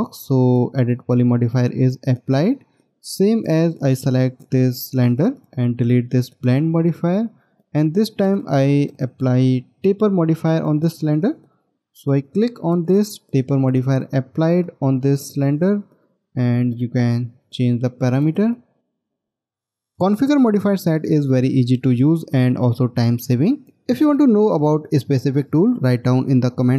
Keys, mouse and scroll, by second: 3.3 middle click, 6.2 right click.